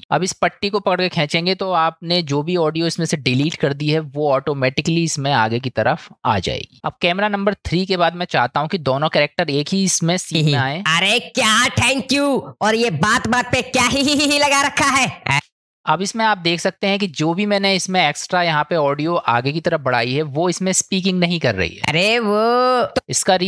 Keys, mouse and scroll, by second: 0.0 ctrl+z, 0.9-5.0 drag, 7.6 click, 10.3 space, 15.4 space, 21.9 space, 23.0 space.